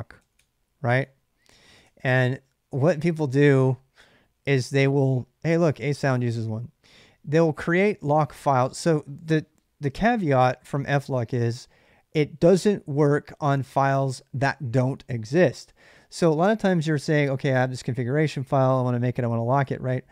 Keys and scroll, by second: 0.0 Tab, 0.5-3.5 typing, 2.6 Return.